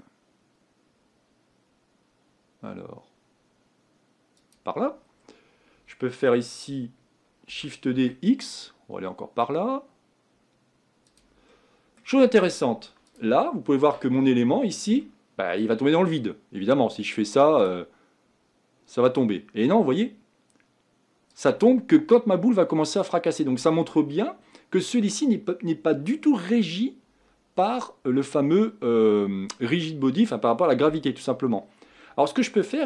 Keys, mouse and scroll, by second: 5.0-7.7 scroll down 4, 7.7 shift+d, 11.5-13.2 middle drag, 13.2 click, 13.5-15.0 scroll up 3, 15.0-17.7 shift+middle drag, 17.7-24.1 drag, 24.1-32.8 middle drag.